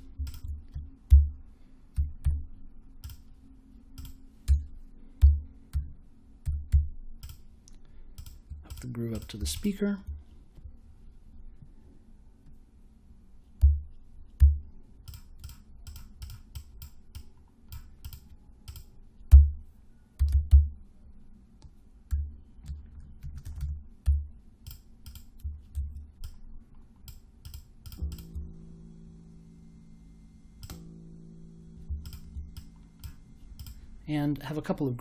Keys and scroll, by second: 1.0 n, 1.9 e, 2.2 z, 4.4-6.7 typing, 13.5 m, 14.3 0, 19.3-20.9 typing, 22.0-24.5 typing, 25.7 super+j.